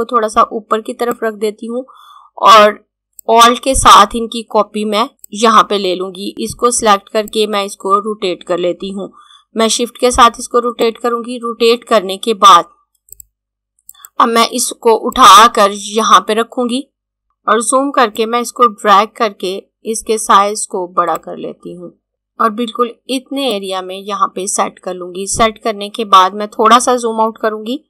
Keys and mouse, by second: 6.3 click, 12.9 click, 18.1 click.